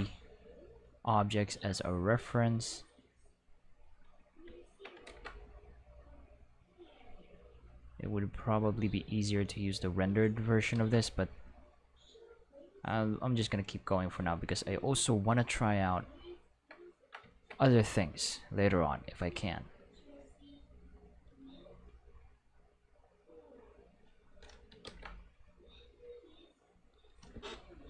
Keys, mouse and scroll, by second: 0.7-3.9 drag, 5.1 ctrl+z, 5.9-10.0 drag, 10.7 ctrl+z, 11.5-14.8 drag, 18.3-19.4 drag, 20.3-21.8 drag, 22.8-24.0 drag, 24.9 ctrl+z, 25.5-26.8 drag.